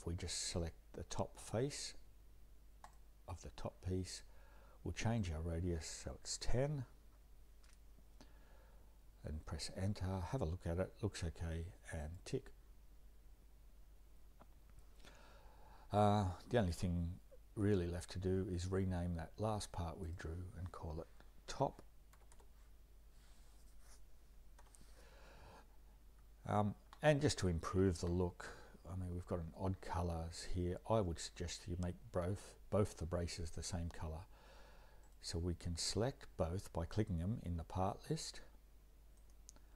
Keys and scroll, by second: 6.1-6.9 typing, 7.0 Return, 21.5-22.9 typing, 24.6 Return.